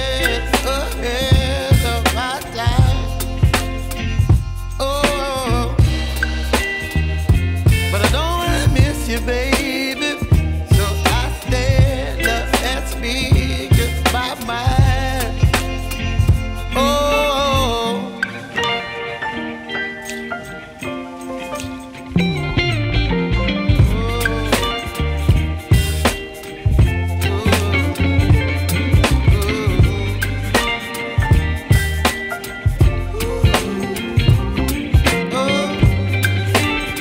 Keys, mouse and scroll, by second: 0.2 ctrl+s, 0.9 KP_0, 2.2-2.5 scroll up 2, 3.7 ctrl+s, 4.8-5.5 middle drag, 5.5-6.2 scroll down 5, 6.2-8.8 middle drag, 8.8 KP_0, 9.6-10.8 scroll up 3, 10.8 ctrl+s, 16.7 scroll down 4, 19.8 g, 25.0 scroll up 2, 26.1 ctrl+s, 26.9 scroll up 1, 28.6 click, 30.0 middle click, 30.4 scroll up 3, 31.3 middle click, 31.8 scroll up 1, 32.9-37.0 drag.